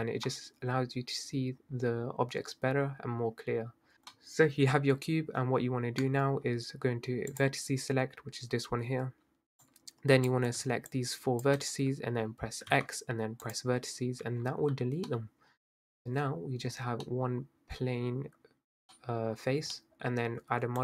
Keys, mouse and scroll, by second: 0.2-0.8 scroll down 2, 0.8-2.0 scroll up 3, 2.0-3.9 scroll up 1, 3.9 shift+a, 4.1-4.7 middle drag, 4.7-5.0 scroll up 2, 5.0-5.4 scroll down 4, 5.6-6.0 scroll down 4, 6.0 Tab, 7.4-9.7 drag, 10.9 shift+click, 12.7 x, 14.3 Tab, 15.1-17.3 middle drag, 17.3-18.0 scroll down 1, 18.0-19.0 scroll down 1, 19.0-20.1 middle drag, 20.1-20.8 scroll down 1.